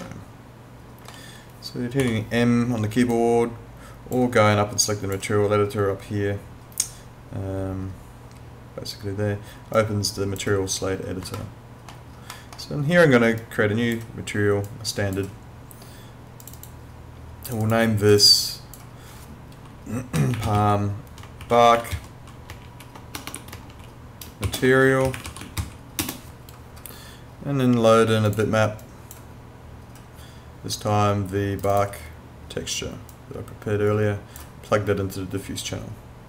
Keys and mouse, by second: 0.0 alt+middle click, 2.0 m, 3.1 click, 9.8 click, 11.4 alt+middle click, 13.4 click, 20.0-26.1 typing, 28.2 click, 31.6 click.